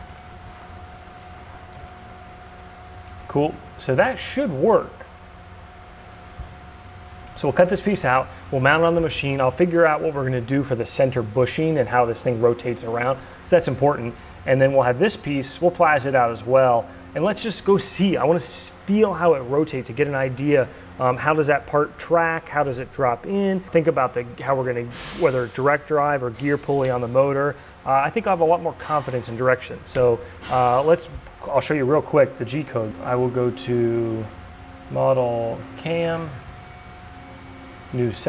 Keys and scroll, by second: 1.6 Delete, 1.7 Return, 32.8 ctrl+s.